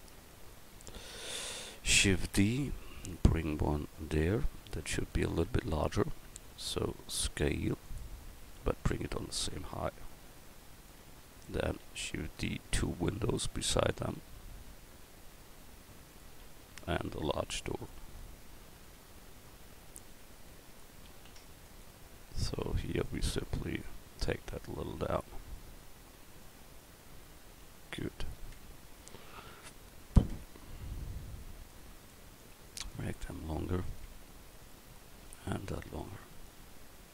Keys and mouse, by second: 2.2 shift+d, 5.7 s, 12.7 shift+d, 17.5 shift+d, 21.3 shift+d, 23.4 Tab, 28.5 Tab, 30.3 Tab, 33.1 Tab, 34.1 Tab, 36.6 Tab.